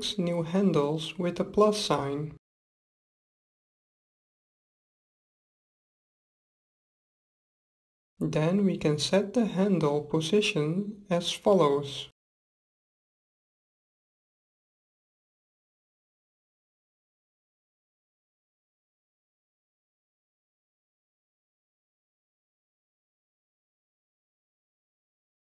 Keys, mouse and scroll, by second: 8.5-10.4 drag, 16.6-18.4 drag, 20.9-22.8 drag.